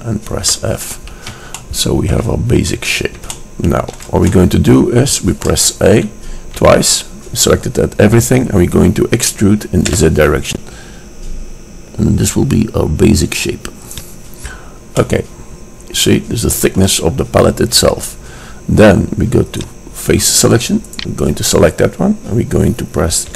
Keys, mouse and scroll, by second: 0.7 f, 1.7-3.0 drag, 6.2 a, 6.7 a, 10.2 e, 15.0 middle click, 15.2 click, 15.3-17.0 middle drag, 17.3-19.7 middle drag, 19.7-22.9 drag, 21.1-21.6 right drag.